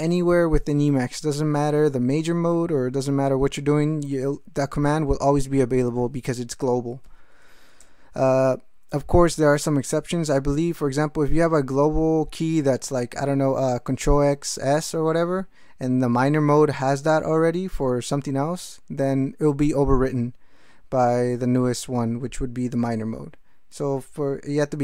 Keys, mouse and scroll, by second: 7.8 Return.